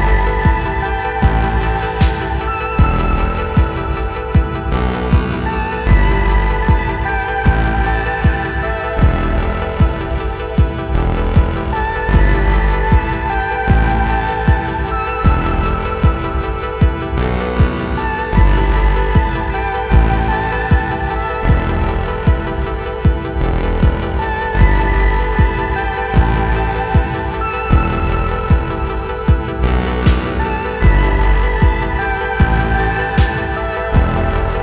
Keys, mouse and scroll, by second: 6.1-7.4 scroll down 4, 7.8-8.5 scroll up 3, 9.3 scroll up 1, 10.0 click, 10.4 click, 11.0 scroll down 2, 11.4-11.9 scroll up 3, 12.1 alt+middle click, 14.8 click, 16.1 ctrl+g, 17.2 right click, 18.4 click, 19.1 scroll down 2, 19.4 scroll up 1, 19.7 alt+middle click, 20.3 scroll down 2, 21.0-23.0 ctrl+right drag, 23.2-23.6 scroll down 4, 23.9-27.4 drag, 27.6 scroll up 1, 27.9 alt+middle click, 28.5 click, 29.6 scroll up 2, 29.8 alt+middle click, 30.1 scroll down 1, 30.6-33.0 drag, 33.2 alt+middle click, 33.8-34.6 drag.